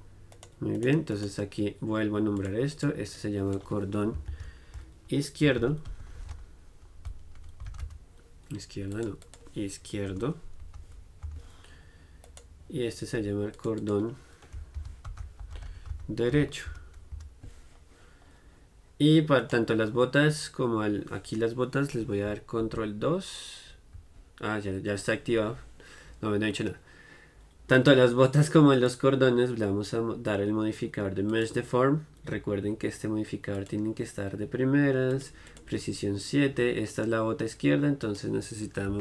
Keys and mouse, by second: 0.5-2.5 right drag, 9.1-11.0 drag, 12.4-13.7 right drag, 19.6-28.9 right drag, 28.9-39.0 drag.